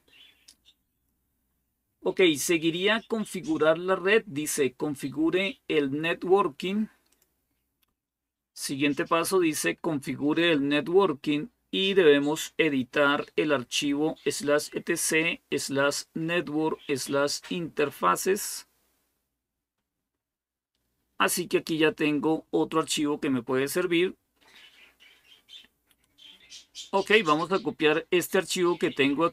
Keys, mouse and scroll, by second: 0.7 click, 1.5 scroll down 1, 6.9 click, 18.6-19.4 scroll down 1.